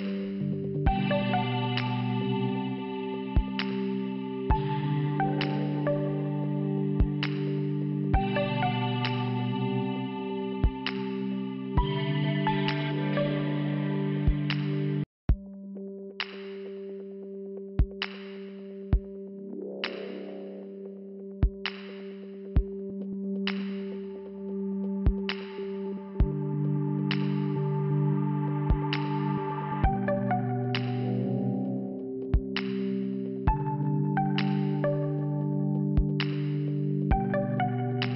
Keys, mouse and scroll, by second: 0.4 scroll down 1, 1.0-1.9 scroll down 1, 2.3 click, 5.1 click, 5.2 click, 6.0 click, 6.2 click, 6.6 Return, 7.6 click, 8.2 scroll down 2, 9.1 click, 10.3 click, 11.7 click, 11.8 click, 13.7 click, 14.9-15.2 scroll down 2, 16.5 p, 17.9 click, 19.6 scroll up 2, 20.6 click, 22.0 ctrl+Delete, 23.0 click, 28.8 click, 29.0 click, 29.6 click, 31.0-31.3 scroll down 2, 32.1 click, 33.1 click, 36.9 5.